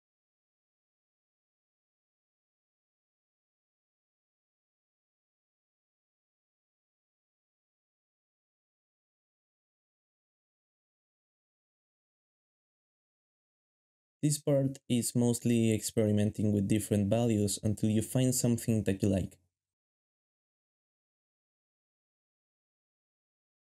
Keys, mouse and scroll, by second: 19.0 g, 21.2 s, 21.8 g, 23.4-23.7 typing.